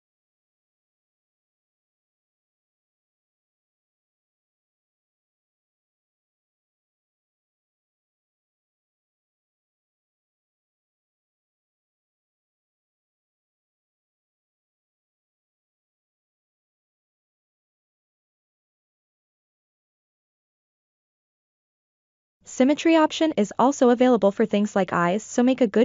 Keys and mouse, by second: 3.0 ctrl+middle click, 3.4-4.7 middle drag, 5.4 middle click, 6.7 click, 7.5 middle click, 8.3 ctrl+middle click, 11.7 f, 13.7-14.7 middle drag, 16.7-18.1 drag, 18.5 middle click, 19.4 ctrl+z, 20.5 click, 21.2 drag, 22.3 click, 24.0 middle click.